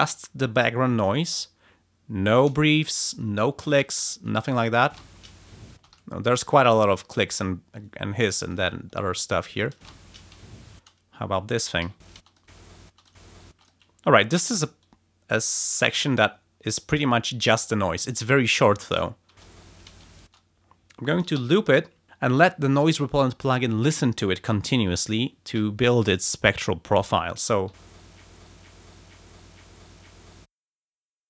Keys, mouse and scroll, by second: 4.8 space, 5.7 space, 6.0 ctrl+scroll down 2, 7.4 ctrl+scroll down 2, 8.2 ctrl+click, 8.7-9.0 ctrl+scroll up 2, 9.1 ctrl+click, 9.7 space, 10.4 ctrl+scroll down 2, 10.7 ctrl+space, 11.8 a, 12.0 space, 12.2 click, 13.0 click, 13.6 click, 14.3 r, 14.8-15.9 drag, 16.0 ctrl+scroll down 2, 16.6 ctrl+scroll up 2, 17.2 ctrl+scroll down 2, 19.3 space, 20.2 space, 21.4 ], 27.7 l, 28.9 click, 30.4 click.